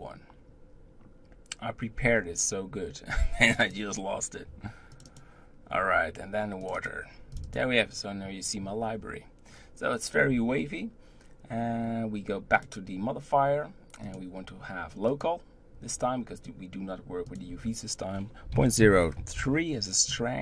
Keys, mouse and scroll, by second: 12.5 click, 14.0-15.2 drag, 17.3-20.3 drag.